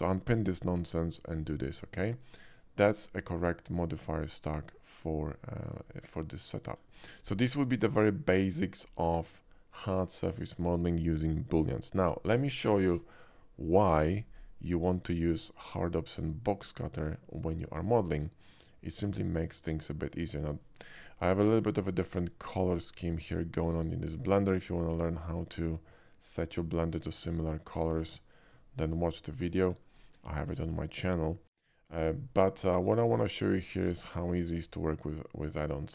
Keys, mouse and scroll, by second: 0.6-1.4 drag, 6.1-6.8 middle drag, 7.0 shift+middle click, 7.5-8.0 shift+middle drag, 8.6 shift+middle drag, 16.7 click, 19.0 click, 20.3 shift+middle drag, 22.5-23.8 shift+middle drag, 24.1-24.5 shift+middle drag, 25.0 shift+middle click, 27.1 shift+middle drag, 27.4-28.5 shift+middle drag, 28.7 shift+middle click, 29.1-29.5 shift+middle drag, 29.7 shift+middle drag, 31.4-31.8 shift+middle drag, 33.2 shift+middle click, 33.9 shift+a.